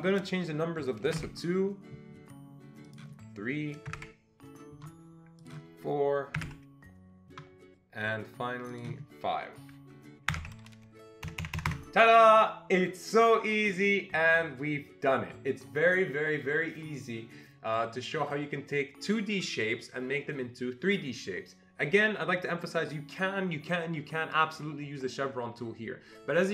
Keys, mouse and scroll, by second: 1.1 BackSpace, 1.2 2, 2.9 click, 3.9 Delete, 4.0 3, 5.4 click, 6.4 Delete, 6.5 4, 8.7 click, 10.3 Delete, 10.4 5, 11.2 Escape, 11.4 Escape, 11.6 Escape, 11.7 Escape.